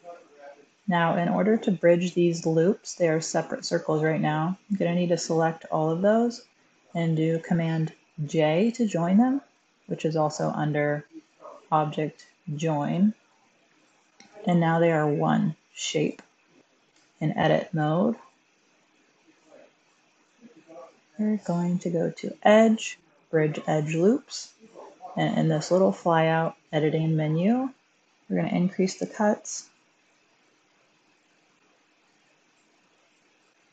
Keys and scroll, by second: 8.1 super+j, 16.8 Tab, 18.8 Tab.